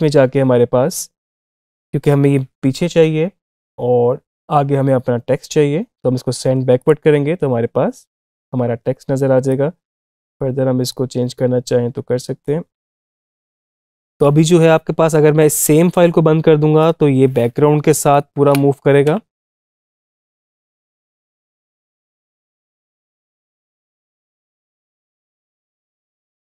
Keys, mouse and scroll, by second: 6.6 click, 9.3-14.4 drag, 16.6 click, 18.2 Up, 18.9 space.